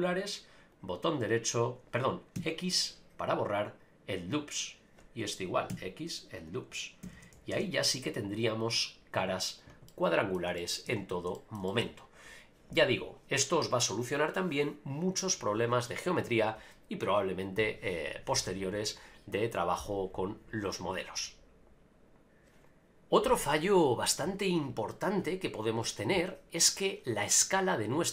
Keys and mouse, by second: 0.7-1.7 right drag, 2.3 x, 5.7 x, 7.0 a, 7.1 a, 7.5 ctrl+r, 9.9 middle click, 10.6 shift+middle click, 10.9 Tab, 11.3 shift+middle drag, 11.7 middle click.